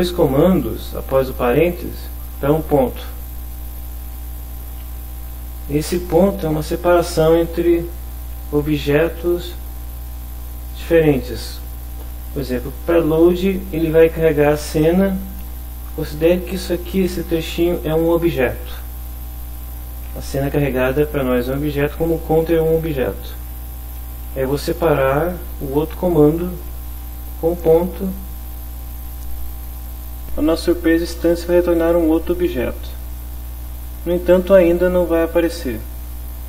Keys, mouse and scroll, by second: 1.1 Right, 1.5 Left, 2.1 Right, 3.5 Right, 4.1 Home, 5.5 Right, 6.0 Home, 13.0 shift+Right, 14.6 Right, 17.1 shift+Home, 27.1 click, 28.1 click, 28.7 click, 29.8 click, 33.1 click, 34.5 F5.